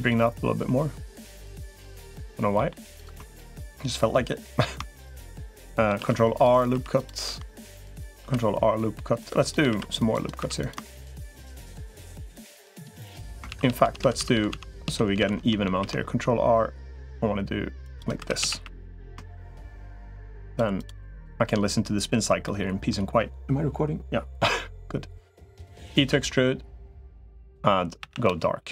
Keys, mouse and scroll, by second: 0.0-1.4 drag, 1.5 middle click, 2.3 middle click, 3.2 shift+click, 5.8 ctrl+r, 6.6 3, 8.0 ctrl+r, 9.6 ctrl+r, 10.2 3, 10.4 click, 13.4 ctrl+z, 13.6 ctrl+z, 13.8 ctrl+z, 14.0 ctrl+z, 14.2 ctrl+z, 14.4 ctrl+z, 14.6 ctrl+z, 15.0 ctrl+z, 15.6 ctrl+r, 18.0 3, 18.2 a, 18.4 a, 22.3 middle click, 25.1 middle click, 26.0 e, 27.8 a, 28.0 g.